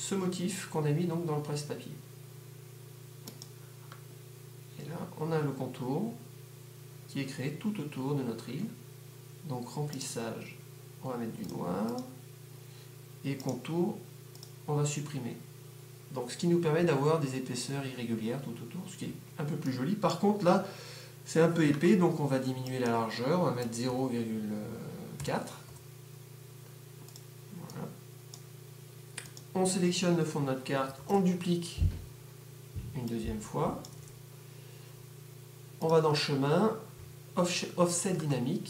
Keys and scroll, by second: 24.0-26.0 typing.